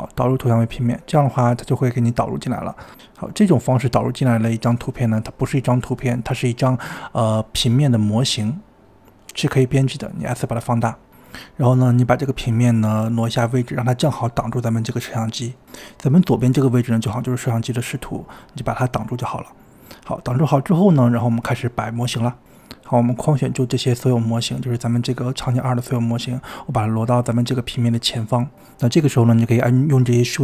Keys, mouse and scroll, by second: 2.5 KP_1, 3.5 g, 5.4-6.3 scroll up 6, 6.3 g, 7.8 s, 12.2 KP_7, 12.5-12.9 scroll down 5, 12.9 shift+middle click, 13.3 g, 14.0 g, 15.5 KP_7, 15.7-16.1 scroll down 4, 16.0 click, 16.5 middle click, 16.8 g, 17.5 scroll up 2, 17.7-18.5 middle drag, 18.1 s, 18.5 g, 19.2-19.7 middle drag, 19.7 click, 20.7 click, 20.9 middle click, 21.4 click, 21.5 click, 21.7-22.0 drag, 22.1-22.7 scroll down 7, 22.2 click, 22.7-23.3 scroll up 2, 23.8 scroll up 2, 24.0 scroll down 1, 24.1-24.9 scroll up 4, 24.9 click, 28.2 KP_7, 28.7-29.0 scroll down 5, 29.0-29.5 shift+middle drag, 29.5 g.